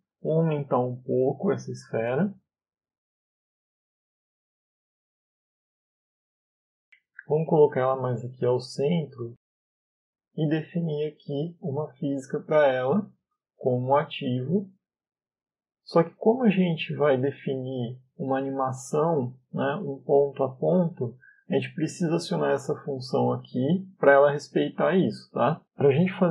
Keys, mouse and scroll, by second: 0.2 s, 2.3 click, 4.0 click, 4.7-5.7 scroll down 6, 5.1 middle click, 6.0 middle click, 7.4 click, 8.6 middle click, 9.3 click, 10.9 middle click, 13.0 click, 17.8 middle click, 24.2 click.